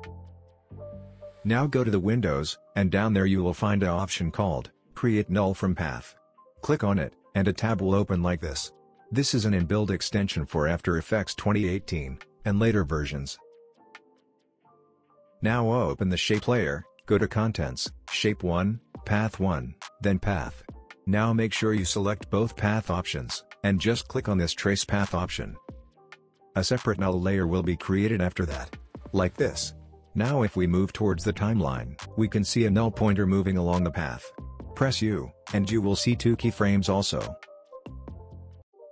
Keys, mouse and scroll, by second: 1.0 space, 1.1-1.7 click, 1.5 space, 2.8 click, 6.2-9.8 drag, 15.5 click, 19.7-27.6 drag, 28.5-31.1 drag, 34.1 u, 36.2-36.8 drag, 37.9 space.